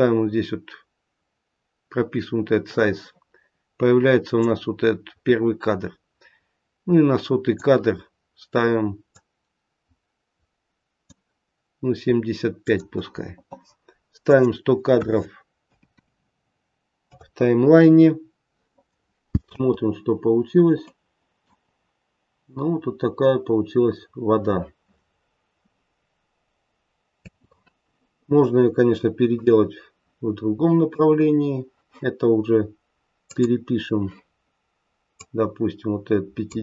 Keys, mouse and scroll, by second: 4.4 click, 9.1 click, 12.6 click, 14.2 click, 15.8 KP_0, 19.4 space, 20.8 middle click, 21.6-22.3 scroll up 1, 22.3-23.0 scroll down 1, 23.1-23.7 scroll down 1, 27.1 space, 29.3 click, 33.2 click, 35.2 click.